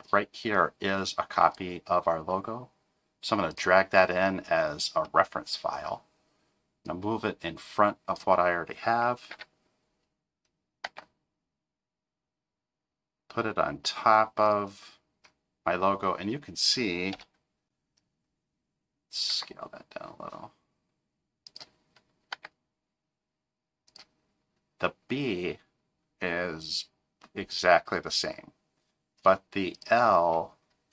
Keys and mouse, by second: 5.0 middle click, 6.9-8.2 drag, 9.3 KP_7, 10.9 g, 17.1 KP_0, 19.3 s, 22.3 g.